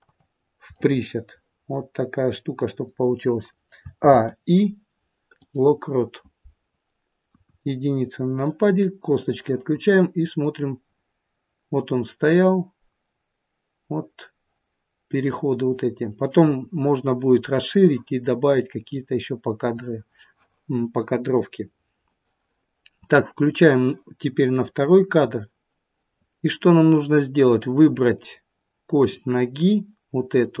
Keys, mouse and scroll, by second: 0.8 middle click, 4.0 a, 4.0 i, 7.3 KP_1, 7.9-9.1 scroll down 1, 9.1 click, 10.9 click, 18.9 click, 23.3 click, 27.4 middle click, 28.9 click, 30.4 click.